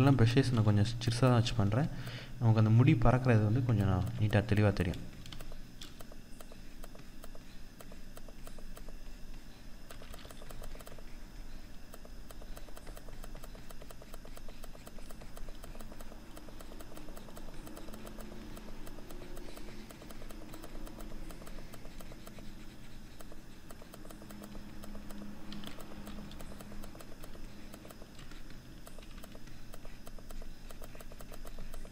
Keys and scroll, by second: 3.4 ctrl+z.